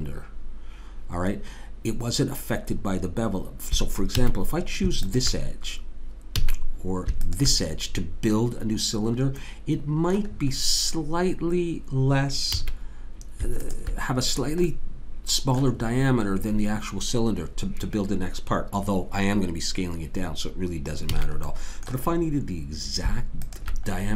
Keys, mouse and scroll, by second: 4.2 a, 5.0 click, 6.4 a, 7.2 click, 9.2-12.6 middle drag, 12.6 a, 13.6 click, 21.1 a, 23.5 click.